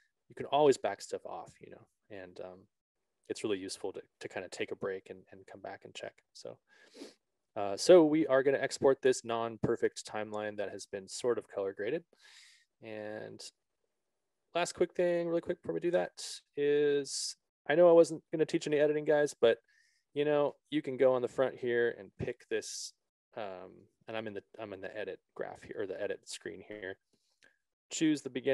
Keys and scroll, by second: 15.7 ctrl+=, 22.9 ctrl+=, 26.4 ctrl+=.